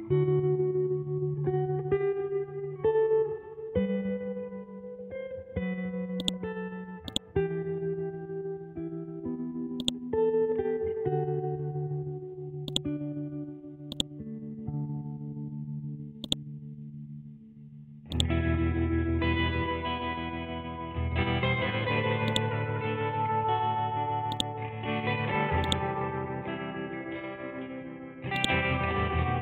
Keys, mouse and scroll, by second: 0.9 F12, 1.6 Tab, 3.2-4.3 scroll down 1, 4.4-4.9 scroll up 1, 4.9-5.6 scroll down 1, 5.6-6.2 scroll up 1, 6.2-8.4 drag, 8.4 scroll up 1, 9.8-11.6 drag, 11.6 ctrl+Home, 12.6-20.3 drag, 20.3 scroll down 1, 21.0-22.2 scroll up 1, 22.2-24.3 drag, 28.3 click.